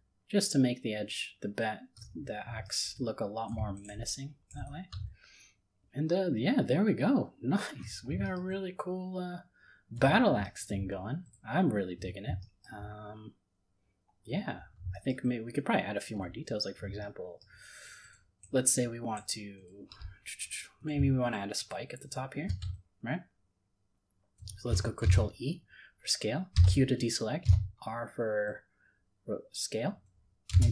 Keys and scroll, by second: 25.0 ctrl+e.